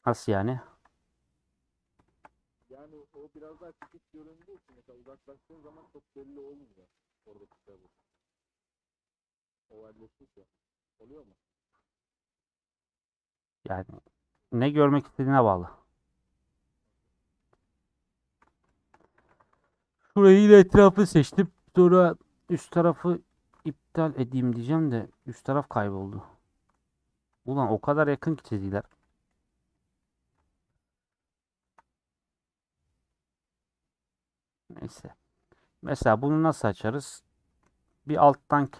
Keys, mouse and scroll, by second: 0.1 click, 1.3 scroll down 4, 1.5 middle click, 2.2 scroll down 1, 2.3 scroll up 3, 3.1 click, 4.4 a, 5.2 u, 6.3 scroll up 1, 6.7 middle click, 6.9-7.2 scroll down 7, 7.4 middle click, 7.8 Tab, 8.2 click, 8.3 scroll down 1, 8.9-9.7 scroll down 6, 9.7-10.8 scroll up 14, 11.1-11.7 scroll down 7, 11.8-13.4 middle drag, 13.4 Tab, 13.6-14.8 middle drag, 14.8 scroll up 3, 15.3 middle click, 15.7-16.2 scroll down 4, 16.2-18.3 middle drag, 18.3 scroll up 4, 18.8 shift+middle click, 19.6 alt+click, 20.8 ;, 22.2 alt+shift+click, 23.4 alt+shift+click, 23.8-24.2 scroll up 3, 24.4 middle click, 25.2 alt+z, 25.7 alt+z, 26.3 alt+shift+click, 27.4 middle click, 29.1 click, 29.9 middle click, 30.4 scroll up 1, 31.6 KP_Decimal, 32.1 middle click, 32.5-32.8 scroll up 3, 33.0 middle click, 33.7-35.3 scroll down 16, 34.2 middle click, 34.8 middle click, 35.4 middle click, 36.3 scroll down 3, 36.4 middle click, 37.2 scroll up 4, 38.4-38.7 shift+middle drag.